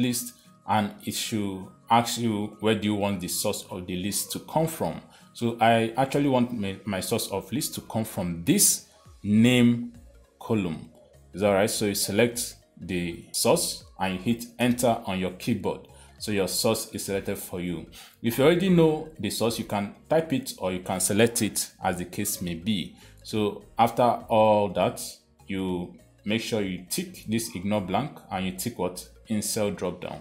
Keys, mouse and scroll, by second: 6.6 click, 9.8 click, 15.0 Return.